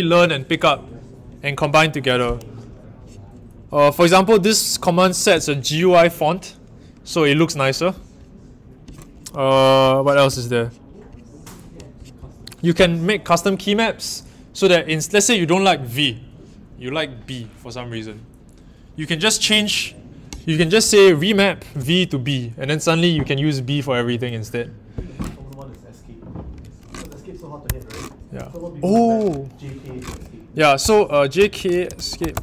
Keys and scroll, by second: 27.6 ⟲, 29.7-32.4 typing.